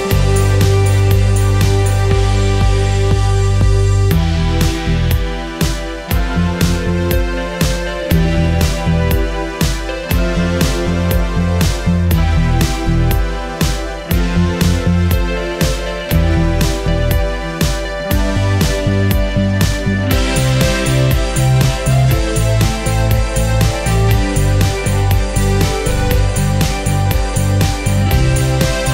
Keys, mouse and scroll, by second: 0.6 scroll up 1, 1.1 ctrl+click, 3.6 scroll down 1, 4.4-6.3 drag, 8.3 ctrl+space, 8.4 ctrl+click, 11.4 right click, 12.0 click, 15.1 Escape, 16.3 click, 20.3 ctrl+x, 21.0 click, 21.5 right click, 23.2 click, 25.1 ctrl+v, 25.7-28.9 ctrl+drag.